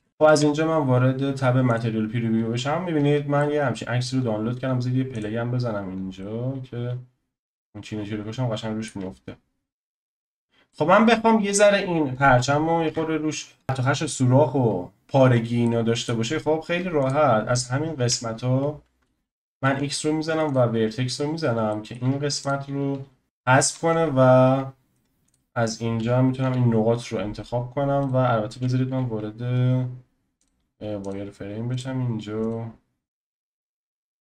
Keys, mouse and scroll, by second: 0.1 click, 1.8 z, 2.5 scroll up 3, 3.0 scroll down 3, 3.4-5.2 middle drag, 5.2 click, 6.2-9.4 middle drag, 10.4 scroll up 4, 10.7-11.5 shift+middle drag, 11.5 click, 12.9 Tab, 13.3-13.6 scroll up 3, 15.3 scroll down 1, 15.6 shift+middle click, 16.3-17.1 scroll up 1, 17.1 click, 17.8-19.9 scroll up 1, 19.9-20.5 scroll up 1, 20.5 x, 21.2-21.7 scroll up 1, 21.7 shift+middle click, 22.5 click, 23.0 f, 23.2 KP_1, 23.4-24.2 scroll up 10, 24.2-24.7 scroll down 1, 24.7-25.3 scroll down 3, 25.3 click, 26.4 g, 30.5 z, 31.1 click, 31.8 click, 33.4 g.